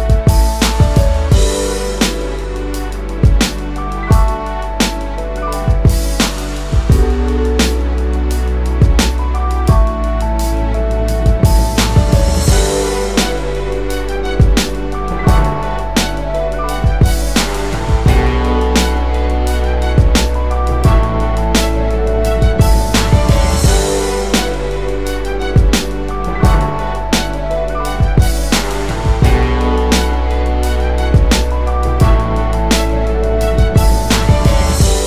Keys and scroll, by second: 3.7-4.4 typing, 5.8 space, 7.9-8.6 typing, 13.3-14.3 typing, 15.5 typing, 17.6 space, 21.8 space, 30.8-31.1 typing, 32.5 space.